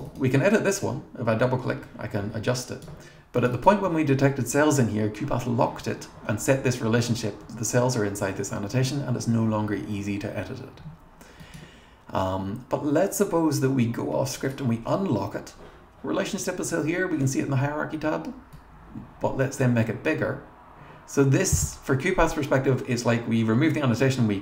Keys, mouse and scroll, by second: 0.1 click, 0.8-3.1 drag, 3.4 click, 3.5 click, 11.4 middle click, 14.4 click, 18.5-19.8 drag.